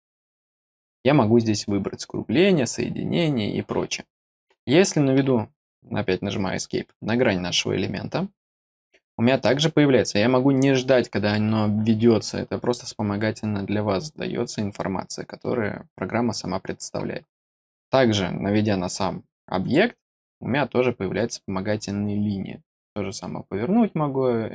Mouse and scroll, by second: 8.3 click, 19.6 click.